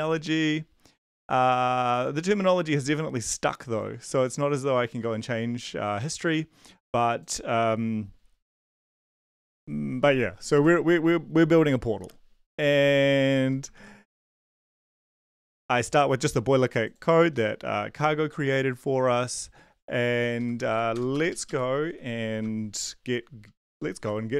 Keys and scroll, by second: 9.2 ctrl+l, 10.5 ctrl+`, 12.0 ctrl+`, 13.2 ctrl+`, 13.7 ctrl+b, 17.3 ctrl+b, 20.4 Up, 20.5 Up, 20.7 Up, 20.9 Return, 21.1 Return, 21.3 Up, 21.4 Up, 21.8 Down, 23.4 Up, 23.7 Return, 24.0 Up.